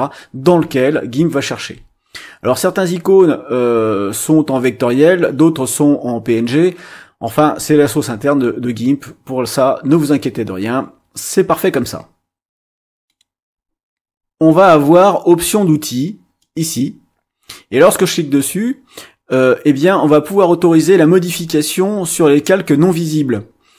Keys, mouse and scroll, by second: 16.4 click.